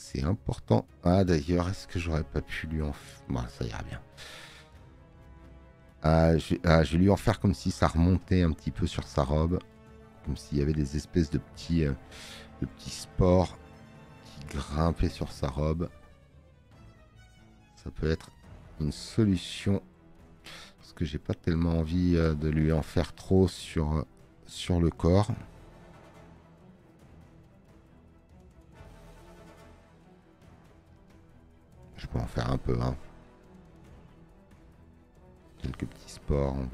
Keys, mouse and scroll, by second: 22.2 space, 22.3 click, 33.2 space, 33.4 click.